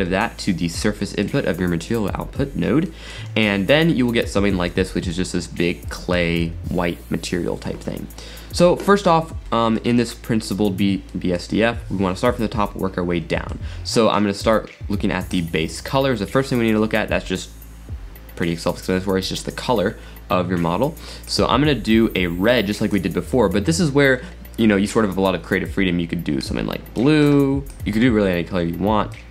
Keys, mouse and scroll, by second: 0.1-0.7 scroll up 8, 1.0-1.7 middle drag, 1.7-2.8 scroll down 4, 2.8-5.9 middle drag, 9.5-10.0 scroll up 8, 10.0-10.8 middle drag, 10.8 scroll down 3, 11.1-15.3 middle drag, 15.3 click.